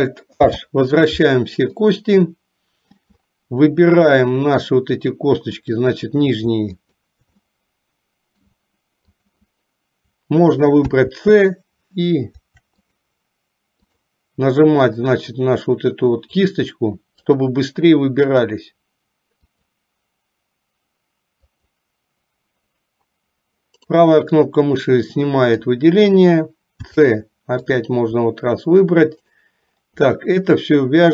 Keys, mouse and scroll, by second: 0.6 alt+h, 1.8-3.2 middle drag, 4.3 middle click, 5.6 click, 6.9 shift+click, 7.7 middle click, 9.2 shift+click, 10.8 c, 24.4-26.0 middle drag, 26.9 c, 30.3-31.1 middle drag.